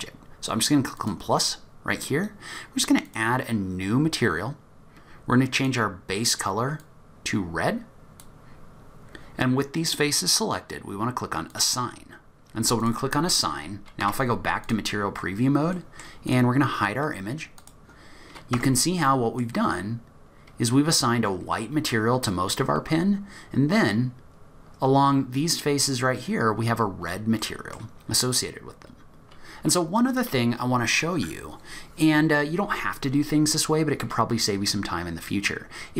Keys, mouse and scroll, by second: 13.3 click, 13.3 scroll down 4, 14.0 z, 15.5 scroll down 2, 15.8 middle click, 16.3 click, 17.6 click, 18.7 Tab, 19.1 middle click, 19.5-20.5 scroll up 6, 20.5-21.4 scroll down 2, 21.4 scroll down 3, 22.6-23.6 scroll up 3, 23.6-24.5 scroll up 2, 25.1-25.8 scroll up 1, 25.8-26.2 scroll down 1, 26.2-27.4 scroll down 15, 27.4 middle click, 28.1-29.2 scroll up 6, 29.2-30.1 scroll down 2, 30.1 click.